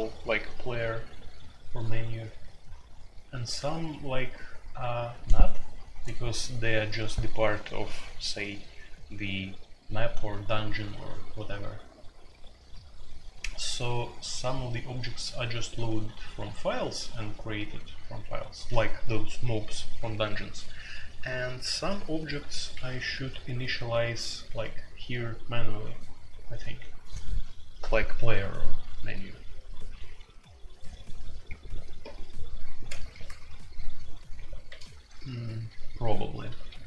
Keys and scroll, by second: 24.1-25.4 typing, 34.6-36.8 typing.